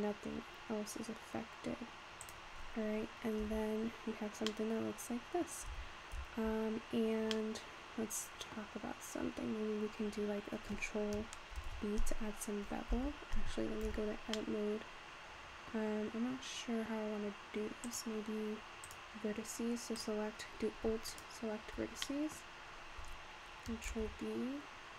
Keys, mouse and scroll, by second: 2.6-3.5 scroll down 3, 3.5 Tab, 3.8-4.5 scroll down 2, 4.5-5.8 middle drag, 5.8 Tab, 6.2 Tab, 6.7-7.4 scroll down 4, 7.4-9.0 middle drag, 9.0-11.4 scroll up 1, 11.4 scroll up 1, 11.6 ctrl+b, 13.9 Tab, 14.3-17.5 middle drag, 17.9 click, 18.9 click, 19.3-20.0 scroll up 3, 20.0 click, 21.1 alt+click, 22.1 middle click, 22.4-23.4 scroll down 2, 23.9 ctrl+b.